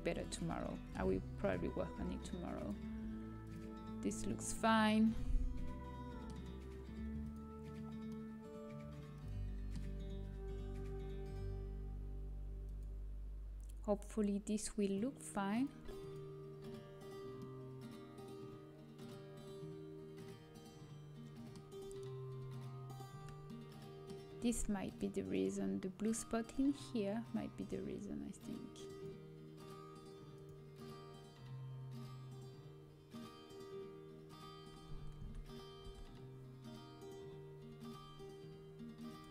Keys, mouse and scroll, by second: 0.3-2.5 middle drag, 2.5-5.1 drag, 4.4-6.6 middle drag, 7.2-9.3 drag, 8.0 middle click, 9.3-10.3 middle drag, 12.6-14.5 drag, 14.8-19.8 drag, 21.7-23.0 scroll up 1, 23.0-24.5 scroll down 1, 24.5-25.4 scroll down 1, 28.8-32.2 drag, 34.6-39.3 middle drag, 35.4 Tab, 35.9 a.